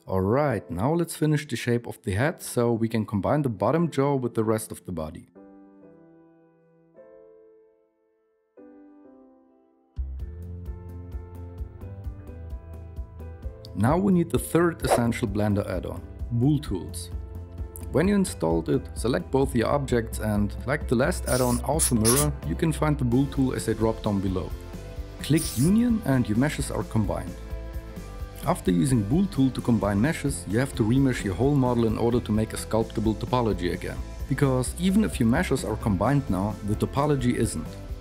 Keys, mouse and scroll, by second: 24.8 ctrl+s, 25.2 KP_1, 26.2 KP_1.